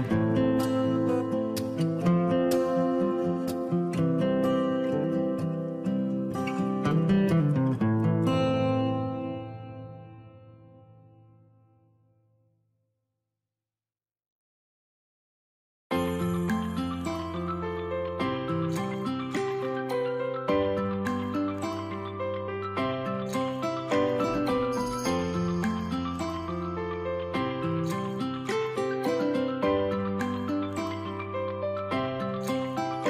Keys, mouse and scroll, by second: 0.7 double click, 4.1 space, 8.7 double click, 26.2 double click.